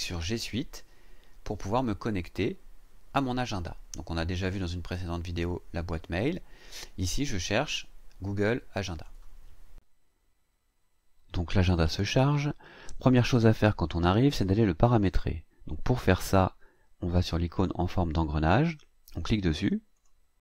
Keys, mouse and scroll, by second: 2.2 click, 8.9 click, 20.1 click.